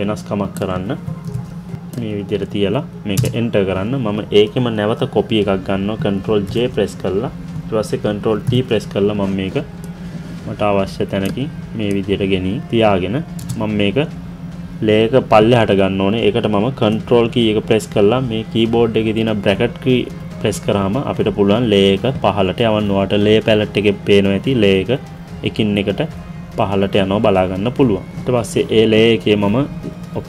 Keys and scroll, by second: 1.0 ctrl+t, 3.1 Return, 6.0 ctrl+j, 8.1 ctrl+t, 13.3 Return, 16.8 ctrl+[.